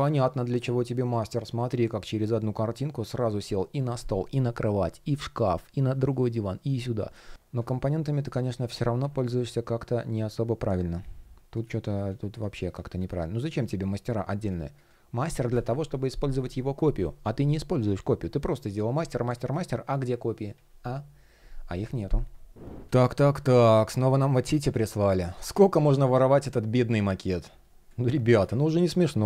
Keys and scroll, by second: 7.4 shift+o.